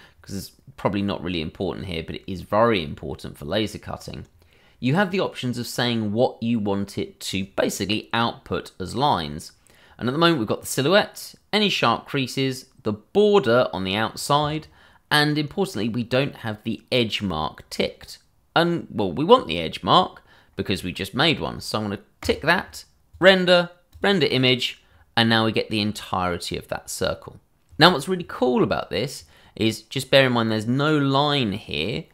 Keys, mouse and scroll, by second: 3.7 scroll down 1, 22.2 click.